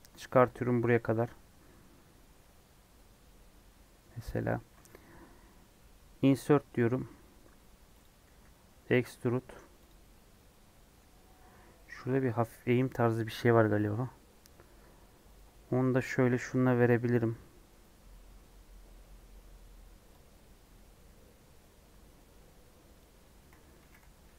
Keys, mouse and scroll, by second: 4.6-6.1 middle drag, 6.1 typing, 8.2 e, 10.1-15.3 middle drag, 15.3 click, 16.0-17.2 middle drag, 17.2 click, 20.2 click.